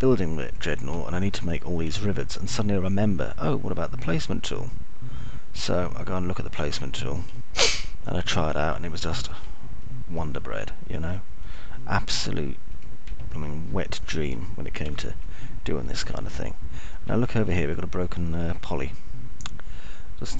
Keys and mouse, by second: 0.0-1.0 alt+middle drag, 3.5 alt+middle click, 4.5-9.1 alt+middle drag, 9.5 middle click, 10.1 alt+middle click, 10.6 middle click, 11.6 alt+middle click, 12.3 middle click, 15.6 alt+middle click, 17.5 Delete, 18.6 alt+middle click, 20.1 middle click.